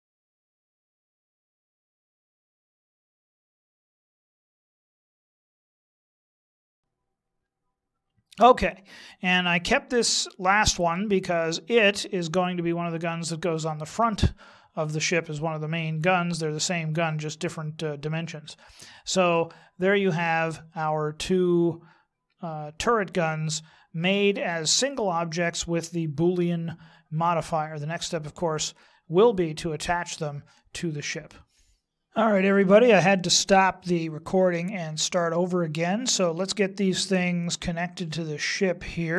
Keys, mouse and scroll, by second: 0.1 click, 0.5 click, 0.7 right click, 1.0 g, 1.0 x, 1.4 right click, 1.5 click, 1.8 click, 1.9 click, 2.1 click, 2.4 click, 2.7 click, 2.9 right click, 3.1 right click, 3.2 g, 3.6 x, 3.8 right click, 4.0 click, 4.3 click, 4.4 click, 4.6 click, 4.8 click, 5.1 click, 5.2 right click, 5.4 g, 6.0 middle click, 6.2 click, 6.5 middle click, 6.6 shift+middle click, 6.7 KP_1, 6.8 shift+middle click, 9.5 middle click, 16.3-19.3 scroll down 2, 19.3 middle click, 28.2-29.6 scroll down 1.